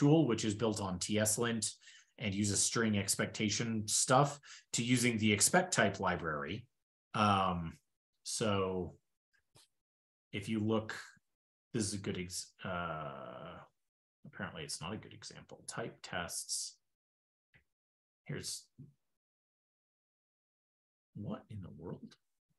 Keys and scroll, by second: 6.8 super+p, 12.6 super+w, 14.4 super+p, 17.4 ctrl+n, 19.5 shift+super+\.